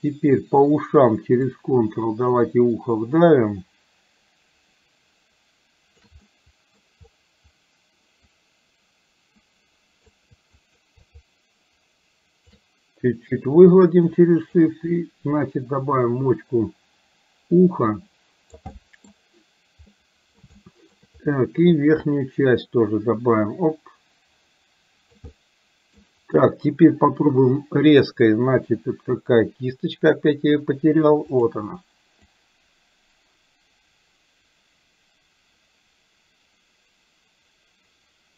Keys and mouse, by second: 1.6-6.1 ctrl+drag, 6.3 middle click, 8.3 click, 9.3 click, 10.7 shift+click, 11.1-12.6 shift+drag, 13.5-14.6 drag, 15.0-18.6 drag, 18.7 middle click, 20.0 middle click, 20.6 shift+middle click, 21.8-25.2 drag, 25.3 middle click, 32.3-38.3 drag.